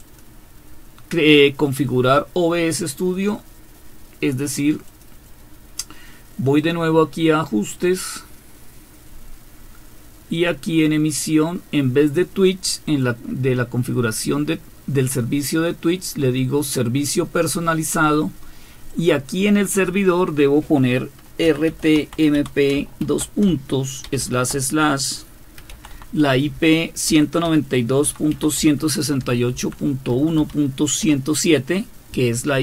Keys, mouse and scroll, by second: 0.0 click, 4.9 click, 6.6 click, 10.3 click, 12.9 click, 15.8 click, 18.9 click, 21.2-24.2 typing, 25.3-31.0 typing.